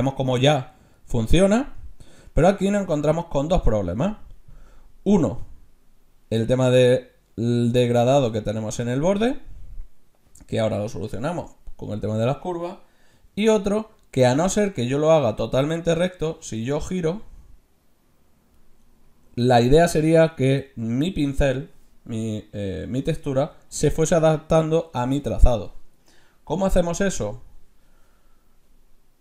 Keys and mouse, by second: 13.6 ctrl+z, 14.4-16.0 drag, 16.7 ctrl+z, 27.2 ctrl+z, 28.8 middle click.